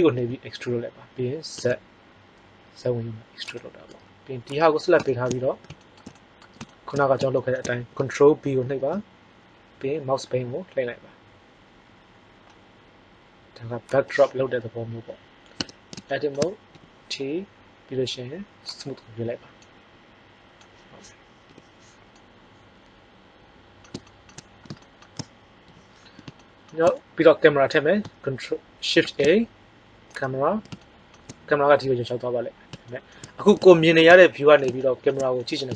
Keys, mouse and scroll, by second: 0.1 e, 3.6-5.4 drag, 4.6 right click, 5.0 middle click, 8.5 ctrl+b, 14.0-15.5 drag, 15.5 Tab, 16.7 t, 19.5-20.9 middle drag, 21.4 KP_5, 25.6 t, 28.9 shift+a.